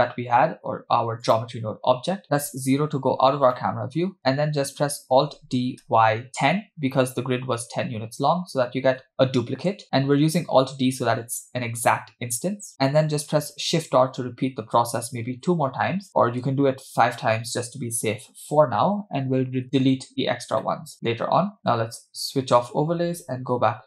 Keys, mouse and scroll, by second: 1.4 click, 4.0 middle click, 5.5 alt+d, 9.7 shift+middle click, 14.0 shift+r, 15.4 shift+r, 17.3 shift+r, 18.3-19.4 scroll down 1, 20.8-21.2 middle drag, 21.6 click, 23.6 KP_0.